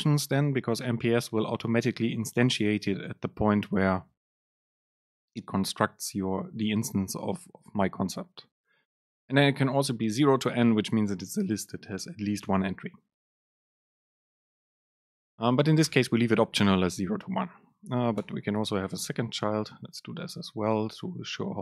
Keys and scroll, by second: 16.4 Down, 16.6 Up, 17.4 Down, 17.8 Up, 18.3 Return, 19.8 BackSpace, 21.5 Left.